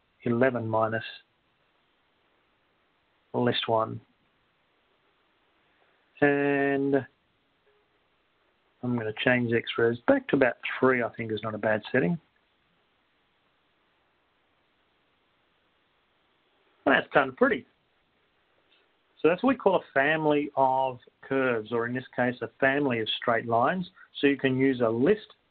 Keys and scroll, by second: 1.4 1, 1.9 1, 3.4 Left, 3.4 -, 5.4 1, 6.6 ), 14.9 3.